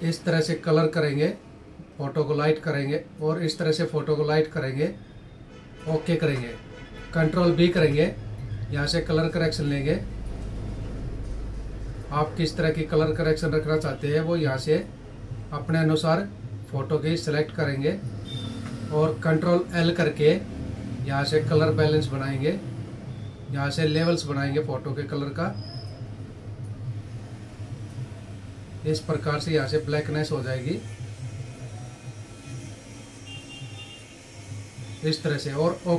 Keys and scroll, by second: 7.1 ctrl+b, 19.3 ctrl+l.